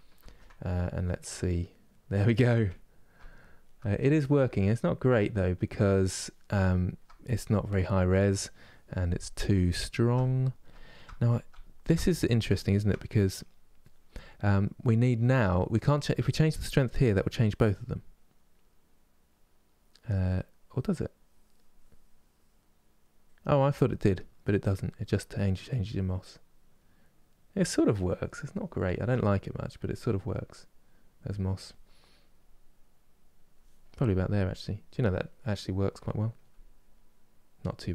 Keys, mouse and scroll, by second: 1.3-16.8 middle drag, 16.8-28.5 drag, 28.5-32.2 ctrl+middle drag, 32.2-33.7 drag, 33.7-37.9 middle drag.